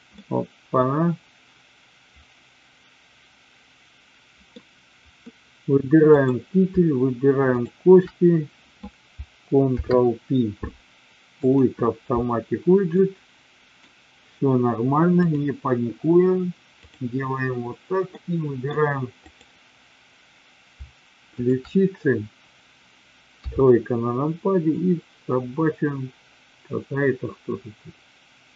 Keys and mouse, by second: 0.2-4.5 middle drag, 6.0 click, 9.6 ctrl+p, 12.9 middle click, 15.2-17.0 drag, 18.2-18.6 middle drag, 19.3 click, 21.3-22.3 shift+drag, 23.3 KP_3, 24.6-28.5 drag.